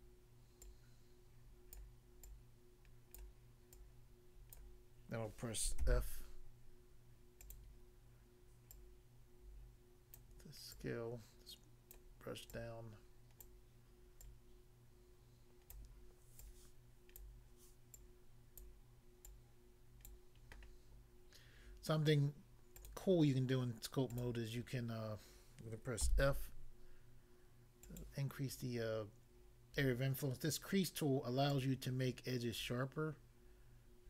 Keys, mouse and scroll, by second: 0.6 click, 1.8 click, 2.3 click, 3.8 click, 4.6 click, 5.8 f, 7.4 click, 7.5 click, 8.8 click, 10.2 click, 10.7 click, 12.0 click, 12.5 click, 13.5 click, 14.3 click, 15.8 click, 16.4 click, 17.2 click, 18.0 click, 18.6 click, 19.3 click, 20.1 click, 21.2 scroll up 1, 22.8 click, 22.9 click, 24.2 click, 24.3 click, 26.0 f, 27.9 click, 28.0 click, 31.6 click.